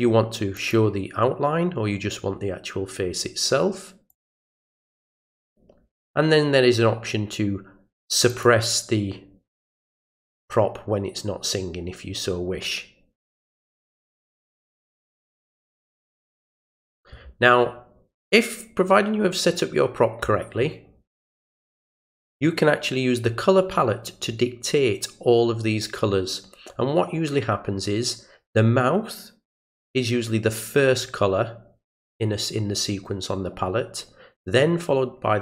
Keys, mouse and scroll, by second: 0.6 click, 4.1 click, 8.3 click, 13.9 click.